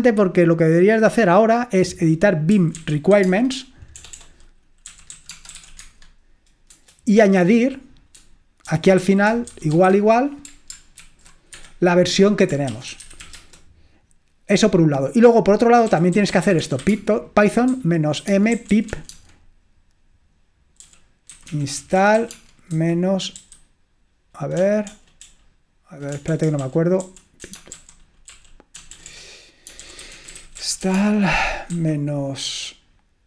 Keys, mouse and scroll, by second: 0.1-1.7 drag, 2.4-10.3 typing, 11.0 ctrl+alt+v, 11.6 Escape, 12.5-14.1 typing, 15.7-19.4 typing, 20.8-23.4 typing, 24.7-31.8 typing.